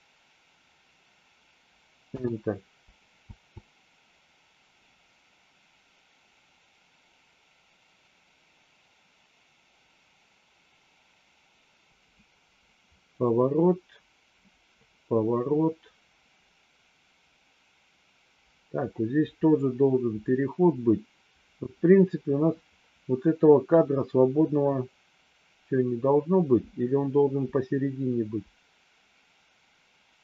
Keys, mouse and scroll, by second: 3.2 space, 11.9-30.2 drag.